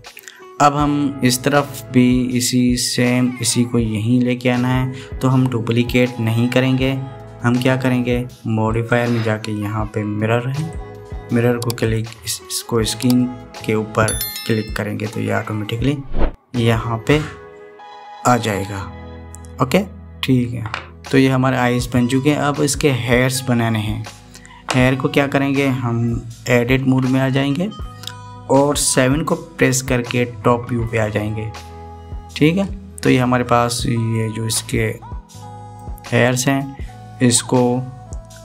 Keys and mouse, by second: 9.4-11.5 drag, 22.5 click, 27.8 Tab, 30.8 KP_7, 35.2-36.6 drag.